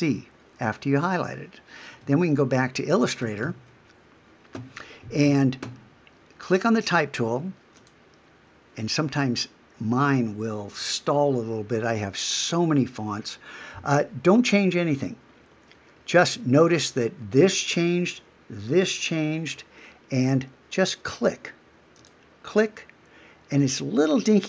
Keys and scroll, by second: 2.0 super+Tab.